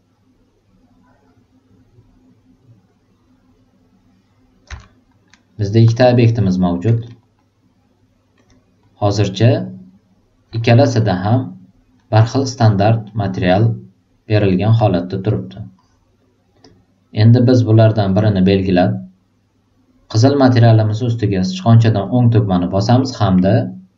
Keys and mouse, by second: 4.8 alt+middle drag, 5.2 alt+right click, 5.5 alt+middle click, 6.2-6.7 drag, 7.1 alt+middle click, 7.3-8.1 alt+drag, 8.7 alt+click, 9.3-10.0 drag, 10.6 alt+right click, 11.0 alt+middle click, 11.9 alt+middle click, 12.4 alt+right drag, 12.8 alt+middle click, 14.0 alt+click, 15.2 click, 15.7-16.1 drag, 16.5 click, 18.0-18.6 drag, 22.0-23.9 right drag.